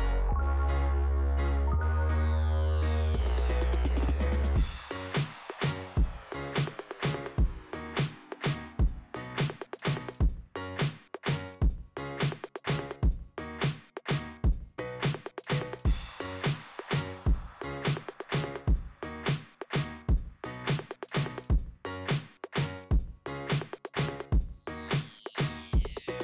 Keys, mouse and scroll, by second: 2.4 click, 3.1-3.4 scroll down 1, 4.1 scroll down 1, 7.9-8.3 scroll up 1, 8.3 click, 9.7 click, 12.6 click, 13.9-14.3 scroll up 2, 18.3 click, 20.9 click.